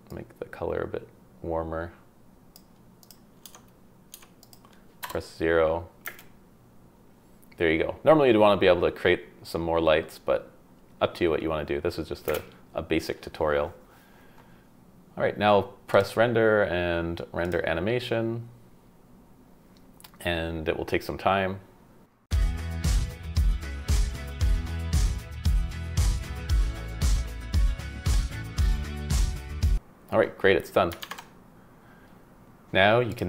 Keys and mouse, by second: 3.0 click, 3.4 Tab, 4.1 Tab, 4.4 click, 5.0 KP_0, 6.0 space, 12.3 space, 15.9-17.6 drag.